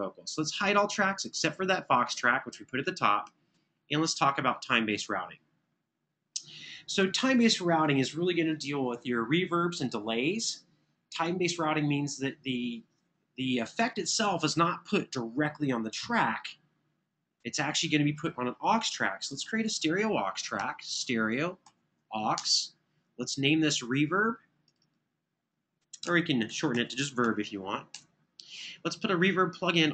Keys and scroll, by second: 19.1 n, 20.4 super+Right, 22.1 Return, 25.6-27.5 typing, 27.7 Return.